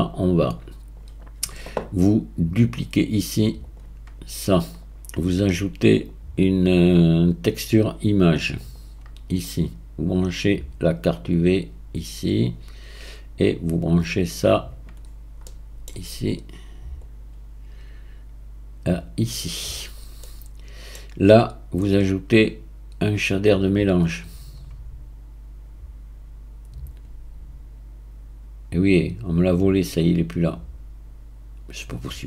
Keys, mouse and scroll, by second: 0.2 click, 2.6 click, 3.0-4.8 right drag, 6.0-9.1 drag, 11.3 click, 13.8 click, 15.0-15.4 scroll up 4, 15.4-17.0 middle drag, 17.0 click, 19.8-20.2 scroll down 2, 20.2-21.9 middle drag, 21.9-25.1 drag.